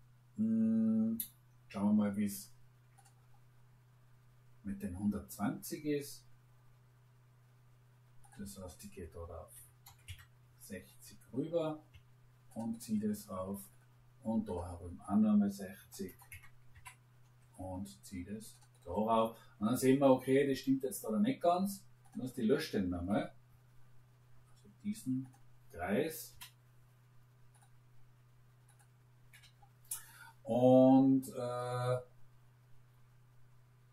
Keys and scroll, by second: 9.5 6, 9.8 0, 10.0 Return, 15.7 6, 16.0 0, 16.3 Return, 16.7 shift+Caps_Lock, 22.9 Delete, 26.2 Delete, 29.3 Delete.